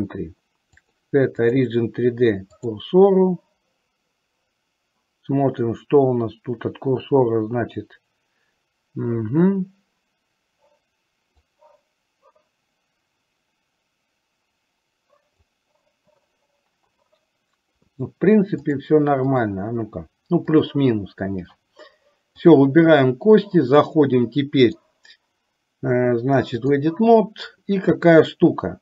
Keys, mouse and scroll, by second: 0.9-2.9 drag, 11.8-15.8 drag, 18.7-20.9 drag, 24.6-26.9 drag.